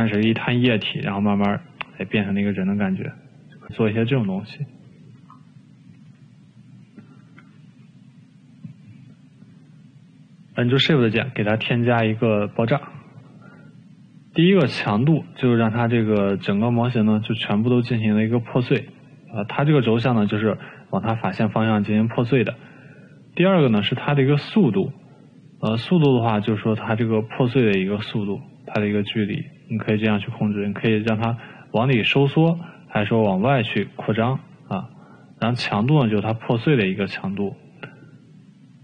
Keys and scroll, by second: 5.8 ctrl+z, 6.8 ctrl+z, 8.1 Delete, 17.8 ctrl+z, 34.9 ctrl+z.